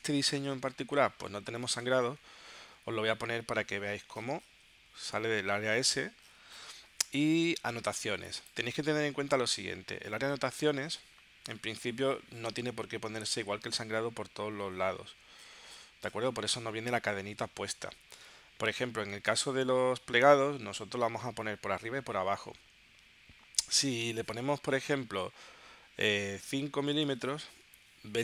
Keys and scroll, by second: 1.4 3, 2.2 Tab, 26.5 5, 27.0 Tab.